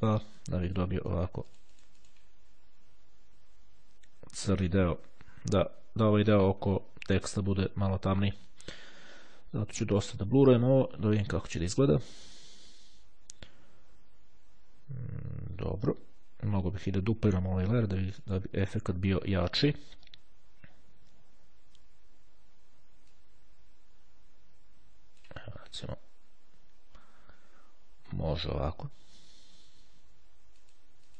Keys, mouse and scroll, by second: 4.6 click, 9.5 KP_0, 10.8 click, 12.0 click, 18.2 click, 22.3-25.9 drag, 26.3-27.3 ctrl+scroll up 3, 27.6-29.4 ctrl+scroll down 3, 30.7 click.